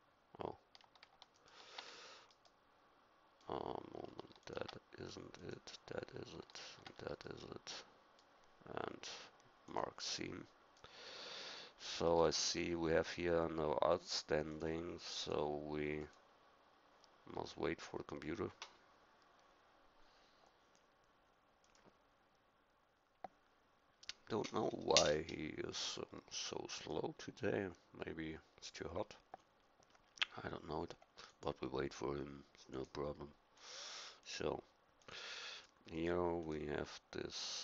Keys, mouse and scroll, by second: 7.2-8.5 middle drag, 10.8-12.1 middle drag, 12.4 middle click.